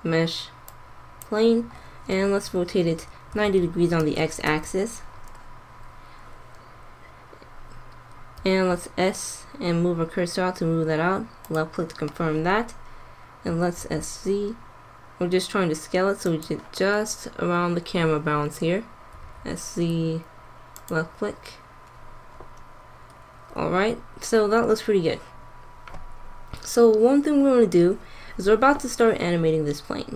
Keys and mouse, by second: 3.2 r, 8.3 s, 12.3 middle click, 13.4 s, 16.7 click, 19.0 s.